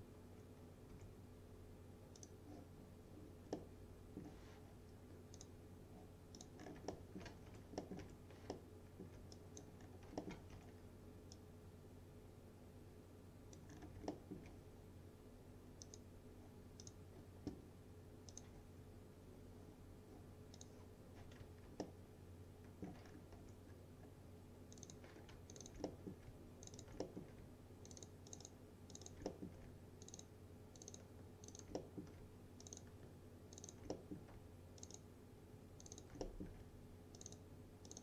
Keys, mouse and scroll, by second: 0.0 F4, 1.0 7, 2.2 click, 3.6-4.5 middle drag, 5.4 click, 6.7 scroll up 1, 7.0 alt+middle click, 7.5 F3, 7.9 middle click, 8.1 1, 8.6-9.2 alt+middle click, 9.4 click, 9.9 scroll up 1, 10.3 alt+middle click, 10.6 F3, 11.4-13.9 drag, 13.8 scroll down 1, 14.1 alt+middle click, 15.9 click, 21.9-23.1 alt+middle click, 23.1 scroll up 1, 23.4 2, 23.7 scroll down 1, 24.8 click, 25.6 ctrl+click, 25.9 alt+middle click, 26.7 ctrl+click, 27.1 alt+middle click, 27.9 ctrl+click, 29.3 alt+middle click, 30.1 ctrl+click, 31.8 alt+middle click, 32.7 ctrl+click, 34.0 alt+middle click, 34.8 ctrl+click, 36.3 alt+middle click, 37.2 ctrl+click.